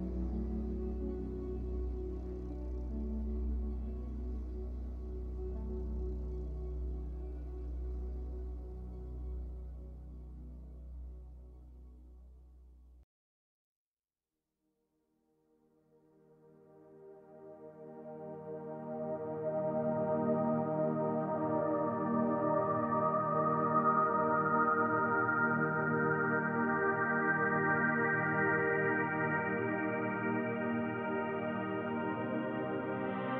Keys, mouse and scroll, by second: 2.0-2.4 scroll up 1, 2.4 g, 3.9 click, 4.8 b, 6.9 click, 7.1 scroll down 1, 7.6 z, 8.3 scroll down 1, 8.6-18.3 middle drag, 9.2 scroll down 1, 10.0 scroll down 1, 10.4-10.7 scroll up 2, 10.7 Tab, 12.6 scroll up 2, 13.8-14.4 scroll up 2, 14.4 KP_1, 15.0 z, 16.2-16.7 scroll up 2, 17.7 Tab, 18.3-19.3 drag, 19.3 b, 21.3 click, 21.5 scroll down 2, 21.7-23.2 shift+middle drag, 23.2 click, 23.4-24.5 middle drag, 24.5 KP_1, 25.0 shift+middle click, 25.8 b, 27.6-33.3 shift+middle drag.